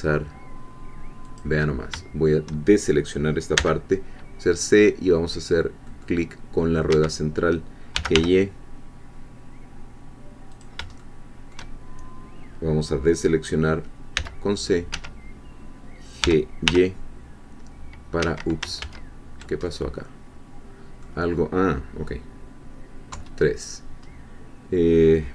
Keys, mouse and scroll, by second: 1.3 click, 3.5 c, 5.9 middle click, 6.9 Escape, 7.7-8.6 typing, 10.5 shift+click, 11.0 shift+middle click, 14.1 c, 14.5 middle click, 14.9 Escape, 16.2 g, 16.7 y, 18.2 Escape, 18.8 ctrl+z, 19.7-21.1 ctrl+middle drag, 23.1 3, 24.0 scroll up 2.